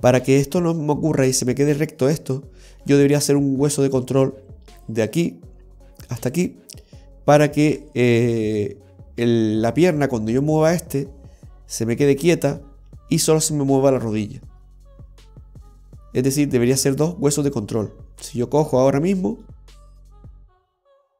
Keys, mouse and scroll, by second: 2.9-5.0 scroll down 1, 5.2 right click, 6.4 right click, 16.1 scroll down 1, 18.4-19.5 scroll up 5, 19.5 shift+middle click.